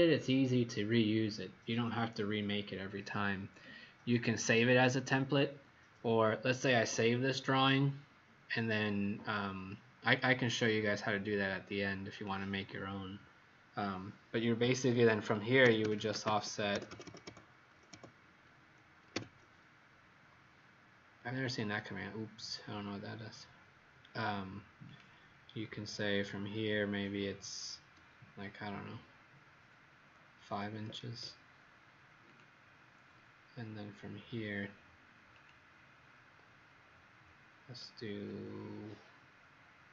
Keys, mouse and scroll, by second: 2.4 click, 15.3-17.0 typing, 18.8-19.6 typing, 21.4 click, 30.6 KP_5, 30.8 KP_Enter, 32.2 click.